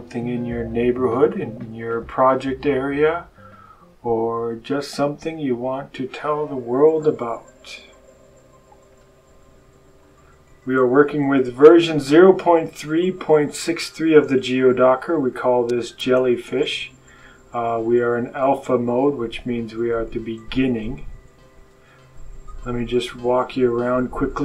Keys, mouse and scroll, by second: 8.8 click, 15.0 click, 18.5 click, 21.5 click, 23.2 click.